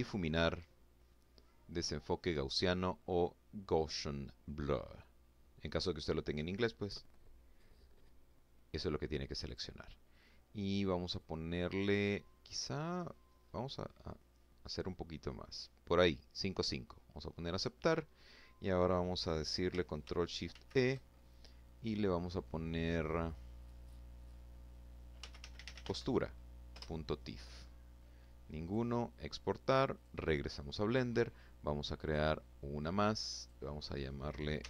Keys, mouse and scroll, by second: 8.2 click, 9.9 click, 11.9-15.4 drag, 16.3 click, 19.3 ctrl+shift+e, 23.7-25.1 typing, 25.5 Return, 27.4 click, 28.7 click, 30.8 click, 32.2 click, 33.1-34.6 typing.